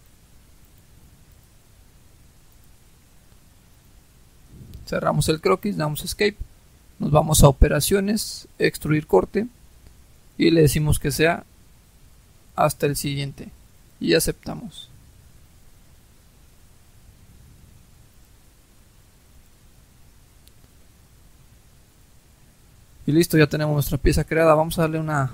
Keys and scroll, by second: 5.3 Escape.